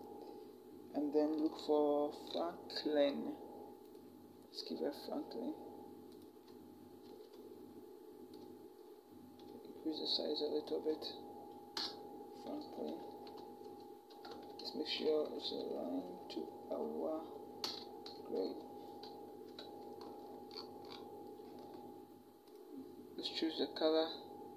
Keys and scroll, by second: 6.8 ctrl+t, 11.6 Return, 12.7 v, 13.2 Right, 13.9 t, 14.8 Right, 15.4 shift+Right, 17.4 Return, 17.8 ctrl+=, 19.3 ctrl+-.